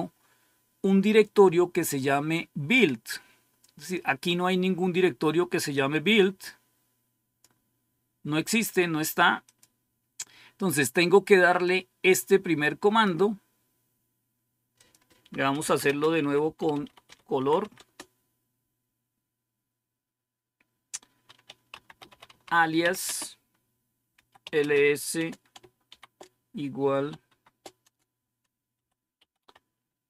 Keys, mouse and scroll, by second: 5.6-7.5 drag, 9.3 click, 11.5-12.9 drag, 13.4 click, 14.6 click, 15.3-18.0 typing, 21.4-23.0 typing, 24.1-25.8 typing, 27.2-30.0 typing.